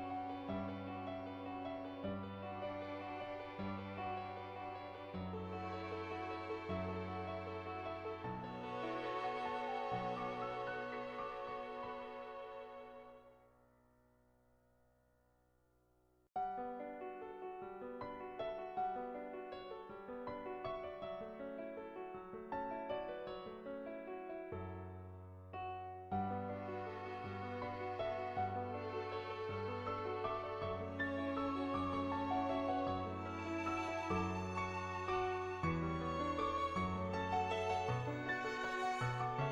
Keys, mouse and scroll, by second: 0.0 ctrl+z, 0.0 [, 0.2 [, 0.5 click, 0.5 [, 1.1 [, 1.9 click, 2.2 click, 2.5 click, 2.8 click, 3.0 click, 3.3 click, 3.6 click, 3.9 click, 4.2 click, 4.4 click, 4.7 click, 5.4 click, 5.6 click, 5.9 click, 6.2 click, 6.7 ], 6.7 click, 7.9 ], 8.0 ], 8.2 click, 8.7 click, 9.3 [, 10.6 [, 12.0 click, 14.4 click, 14.4 ], 14.8 click, 15.5 click, 20.8 ], 21.0 click, 21.5 click, 21.8 click, 22.0 click, 22.9 click, 23.3-27.4 drag, 27.6 click, 28.0 click, 28.2 click, 32.7 click, 33.4 ctrl+z, 35.3 [, 35.5 click, 36.0 ctrl+z, 36.1 [, 36.2 click, 36.5 click, 36.8 click.